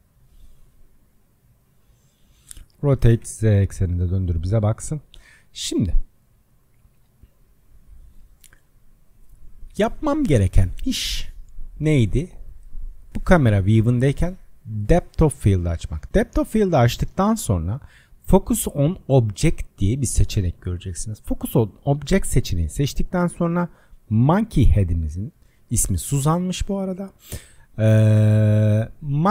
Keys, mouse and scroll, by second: 1.1 click, 2.8 r, 5.6-10.3 middle drag, 12.1 click, 15.0 click, 16.3-20.1 drag, 24.7-29.3 drag.